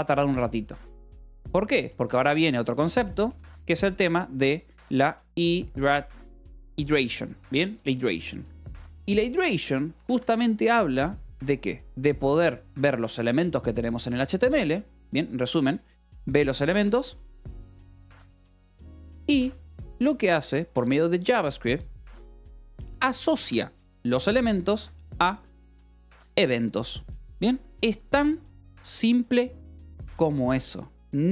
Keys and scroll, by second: 1.4 o, 2.1 BackSpace, 2.6 Return, 3.4 space, 4.4-6.3 typing, 8.7 o, 9.1 Return, 9.8 Escape, 10.0 a, 16.5-19.2 typing, 30.4-31.3 typing.